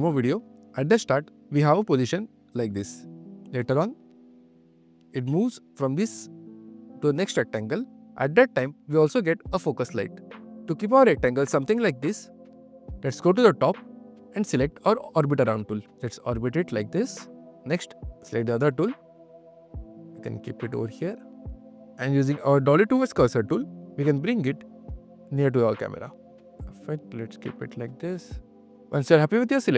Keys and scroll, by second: 28.4 q.